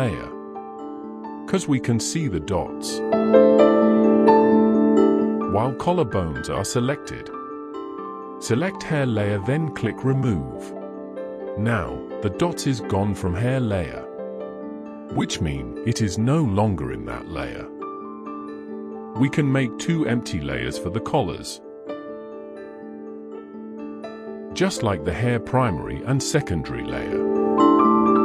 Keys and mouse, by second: 9.2 click, 10.3 click, 12.4 click, 12.6 click, 13.3 shift+middle click, 13.7 click, 14.1 middle click, 14.1 l, 16.9 middle click, 18.8 shift+middle click, 19.6 middle click, 20.3 shift+middle click, 20.9-21.3 middle drag, 21.6 shift+middle drag, 22.1-22.4 middle drag, 22.8 alt+a, 23.2 click, 24.2 l, 24.5-24.8 middle drag, 25.6 l, 26.2 drag, 27.0 l, 27.5-28.2 drag.